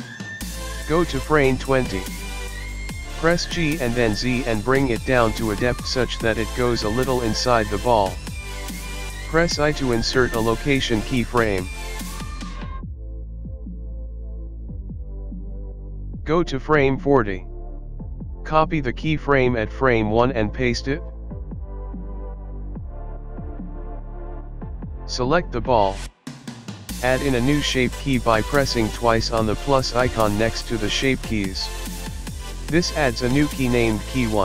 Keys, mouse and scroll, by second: 5.4 g, 12.6 i, 14.4 click, 16.0 click, 17.2 ctrl+c, 18.0 ctrl+v, 19.9 click, 21.1 space, 22.7 space, 25.4 click, 27.4 click, 29.0 click, 29.1 click, 31.3 Tab, 32.9-33.4 scroll up 3, 33.5 shift+middle click.